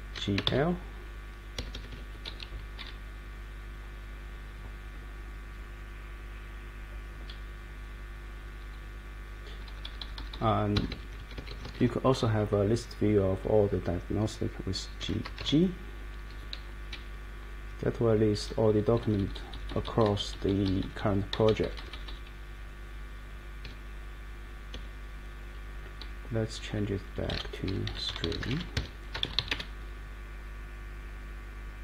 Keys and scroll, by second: 0.0-0.9 typing, 1.5 Escape, 2.8 Down, 7.3 Down, 8.3 Down, 8.3 Down, 8.7 Up, 8.9 Up, 9.1 Up, 9.3 Up, 9.5 Up, 9.7 Up, 10.0 Up, 15.0 g, 16.9 Down, 17.6 Down, 18.1 Down, 18.4 Up, 19.0 Up, 22.0 Down, 23.6 Escape, 24.7 Escape, 26.0 Left, 26.5 Left, 27.0-29.9 typing.